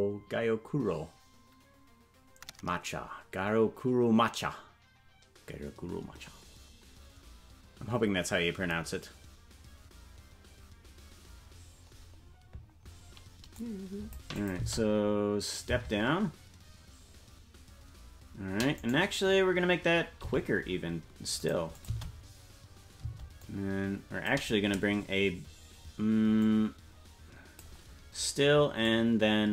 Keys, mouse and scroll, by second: 13.6 click, 14.4 click, 14.6 space, 18.7 right click, 18.7 space, 20.2 g, 21.7-22.8 drag, 21.9 space, 23.4 click, 23.4 space, 26.4-27.7 drag, 28.8-29.5 drag.